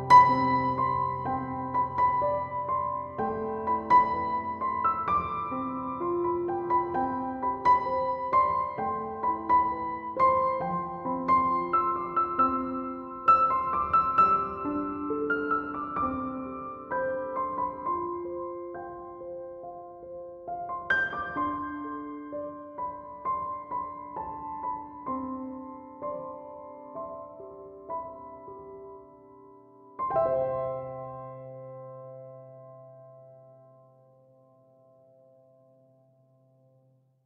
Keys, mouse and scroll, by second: 1.3 Escape, 20.5 right click, 21.6 3, 21.8 2, 22.2 Return, 30.6 1, 30.9 5, 31.7 Return.